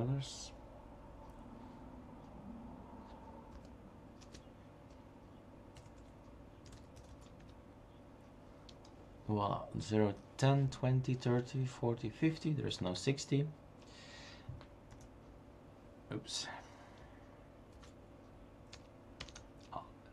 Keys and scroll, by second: 0.3 Return, 3.5 Up, 6.7-8.9 typing, 13.9 space, 17.8 ctrl+c.